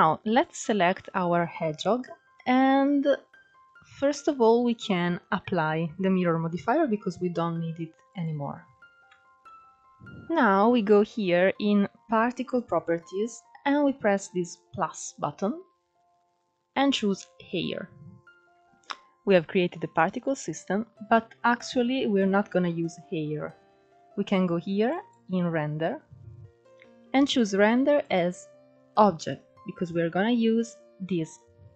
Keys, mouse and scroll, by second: 0.0 shift+middle drag, 0.3 scroll up 3, 1.5-3.8 shift+middle drag, 3.8-6.9 drag, 7.9 scroll down 2, 8.2-8.7 middle drag, 8.7 scroll up 1, 8.8 Tab, 9.5 click, 11.6 click, 14.1-16.6 drag, 17.5 scroll down 2, 18.1 middle click, 18.3 scroll up 1, 21.9-22.7 scroll down 2, 23.6-24.7 drag, 24.7-26.8 scroll down 2, 26.8-29.8 drag.